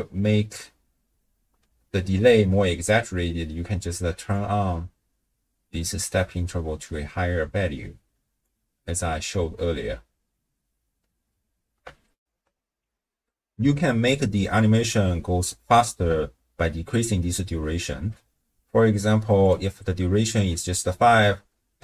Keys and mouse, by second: 1.7 shift+space, 2.5 space, 4.3-8.5 shift+drag, 12.2 ctrl+alt+shift+w, 12.4 ctrl+alt+shift+q, 17.7 shift+space, 19.4-20.5 drag, 21.1 space.